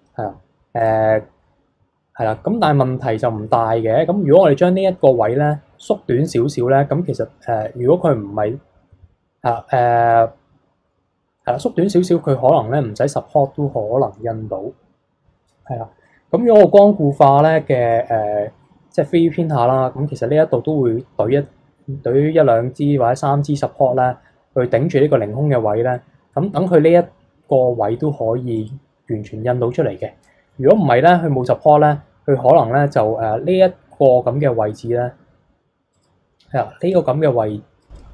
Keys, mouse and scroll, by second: 0.7 click, 10.1-13.2 middle drag, 15.6-18.7 middle drag, 19.1-19.7 scroll up 2, 19.7-22.8 middle drag, 25.9-28.6 middle drag, 28.6-29.9 drag, 29.9 scroll down 1, 30.2-30.7 middle drag, 30.7 KP_3, 35.9 click, 36.9 click, 38.0 click.